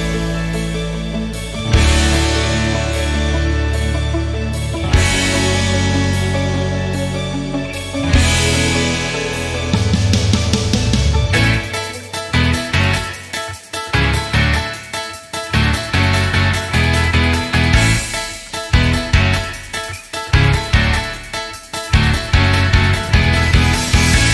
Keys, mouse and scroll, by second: 0.2 alt+z, 0.9 Tab, 1.4 click, 2.1 s, 3.8 Tab, 4.4 alt+z, 4.6 click, 4.8 scroll down 1, 5.2-5.9 shift+middle drag, 5.9 scroll up 2, 9.8 scroll up 2, 10.2-13.1 shift+middle drag, 13.9 click, 14.3 shift+click, 15.4-16.2 drag, 16.2 scroll down 1, 16.4-17.7 middle drag, 17.7 r, 20.5 click, 20.9 shift+click, 21.7-23.2 middle drag, 23.2 r.